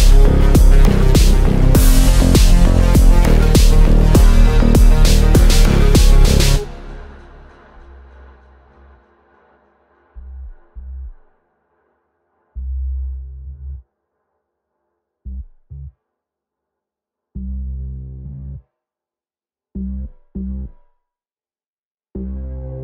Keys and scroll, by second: 0.6 Delete, 9.7 shift+F2, 10.7 F9.